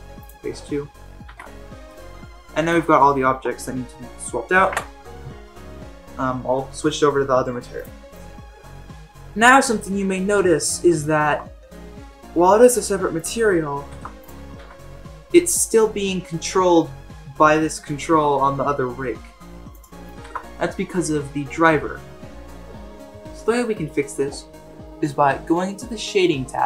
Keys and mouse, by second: 1.3 h, 2.0-2.7 middle drag, 4.6 alt+h, 11.0 shift+middle drag, 13.9 ctrl+Tab, 14.2 click, 14.5 g, 20.2 ctrl+Tab.